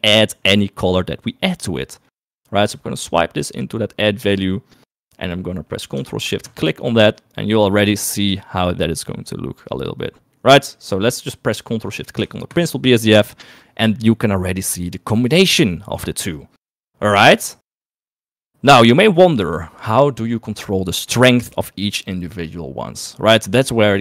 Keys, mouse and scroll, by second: 1.1 middle click, 2.8 middle click, 3.6 click, 3.9 click, 5.7 middle click, 11.8 click, 13.1 ctrl+shift+click, 17.9 middle click.